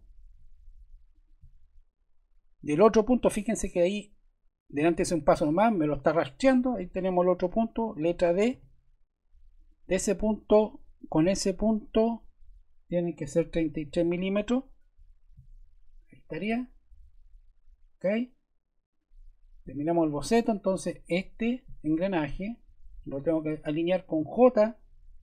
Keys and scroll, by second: 7.4 Escape, 8.5 d, 13.8 3, 14.2 Return, 24.1 j.